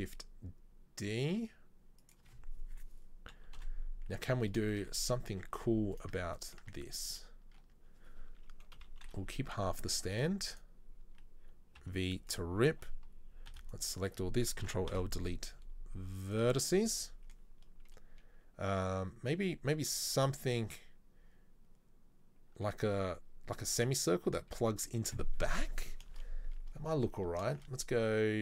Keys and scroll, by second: 3.4 KP_3, 3.6 KP_1, 5.4 Tab, 6.1 Tab, 6.8 Tab, 7.6 Tab, 8.9 KP_3, 9.9 ctrl+r, 11.9 v, 13.6 b, 14.7 ctrl+l, 15.1 Delete, 26.2 shift+a, 27.5 shift+a.